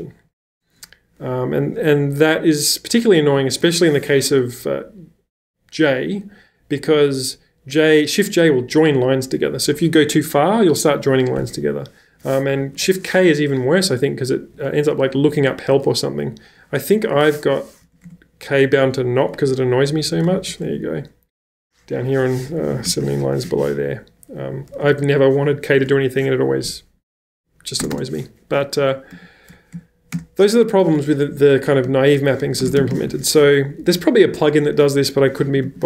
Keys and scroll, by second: 2.9-3.3 typing, 12.6 ⟲, 14.4 k, 16.8 -, 17.8 k, 18.1 Return, 20.1 /, 20.4 shift+k, 20.7 Return, 22.2-23.4 typing, 24.8 h, 24.9 h, 27.8 space, 27.9 space, 29.2 j, 30.2 Return, 31.9-33.6 typing, 33.8 Escape, 33.9 Escape, 35.4 j, 35.6 j.